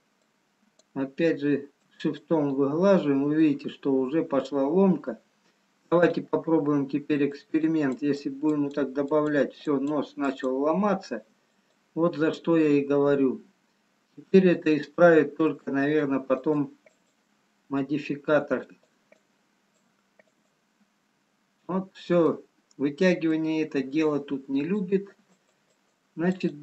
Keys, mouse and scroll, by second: 0.7 click, 4.1 shift+click, 4.1 middle click, 6.5 click, 6.5 scroll up 2, 7.8 click, 8.8 click, 9.7 click, 12.0 click, 13.4 middle click, 16.0 shift+click, 18.9 shift+click, 19.2 click, 21.7 scroll down 1, 22.8 middle click, 24.8-26.6 shift+click.